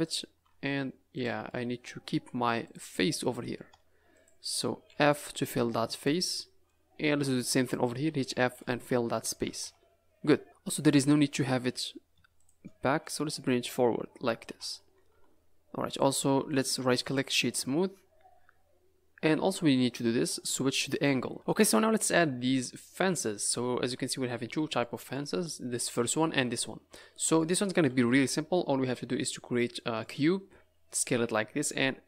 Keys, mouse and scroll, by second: 0.0 click, 0.3 Tab, 1.1 click, 1.4 middle click, 1.9-2.6 scroll up 2, 2.6 click, 2.9 middle click, 4.1 shift+click, 4.8 f, 5.1 middle click, 5.9 click, 6.3 middle click, 6.9 scroll up 3, 7.7 shift+click, 8.3 f, 8.8 Tab, 9.1 scroll down 5, 9.4 a, 9.6 a, 10.4 Tab, 10.8 click, 11.3-11.7 scroll up 3, 11.7 click, 12.4 shift+click, 13.0 click, 14.5 Tab, 15.1 a, 15.2 a, 15.3 s, 15.4 scroll down 4, 15.8 click, 16.4 right click, 17.5 middle click, 18.1 scroll down 3, 18.4-19.4 scroll up 4, 19.4 r, 19.6-20.6 scroll down 2, 20.9 click, 23.3-24.8 scroll up 3, 24.8 middle click, 27.0-27.3 scroll down 5, 27.3 middle click, 27.9-28.2 scroll up 4, 29.2 scroll up 4, 29.7 middle click.